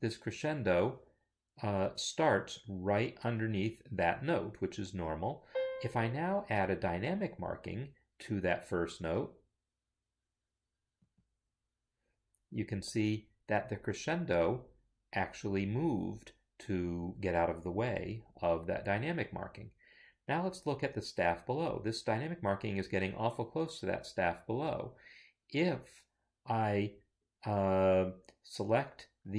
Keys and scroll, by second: 1.5 Escape.